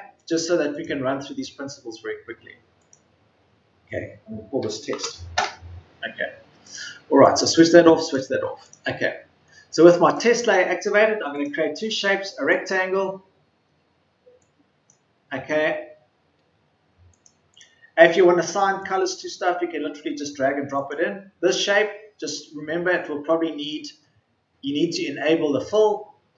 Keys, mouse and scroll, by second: 4.5 t.